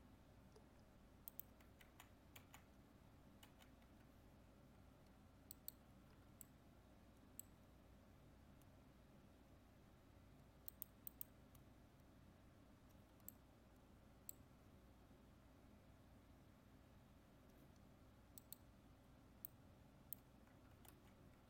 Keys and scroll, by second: 1.9 ctrl+z, 20.9 ctrl+z.